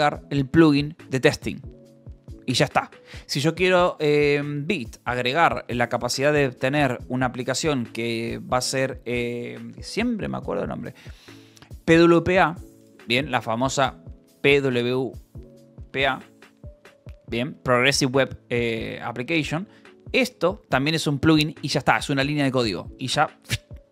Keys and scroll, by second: 14.7 shift+p, 16.0 w, 18.4 a, 19.0 a, 19.6 BackSpace, 20.6 Escape.